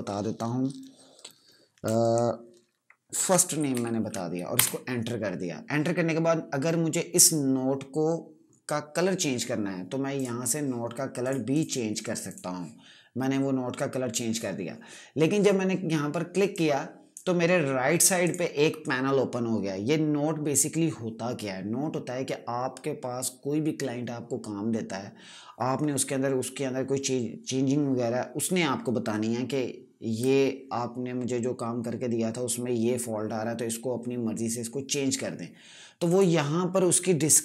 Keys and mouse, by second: 2.8-4.1 typing, 4.5 Return, 10.0 click, 16.4 click, 36.0 click.